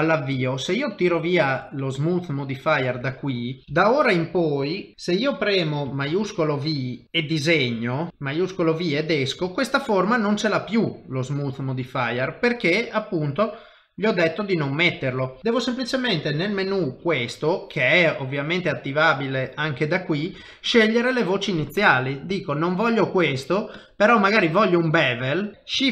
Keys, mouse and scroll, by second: 3.0 middle click, 3.6 KP_3, 4.9 click, 4.9 x, 6.1 shift+v, 7.0 click, 9.5 shift+middle click, 10.4 middle click, 11.5 middle click, 11.7 shift+middle click, 15.4 click, 15.4 middle click, 16.5 ctrl+alt+shift+v, 18.2 click, 22.6 click, 25.5 click, 25.5 shift+KP_3, 25.8 shift+v.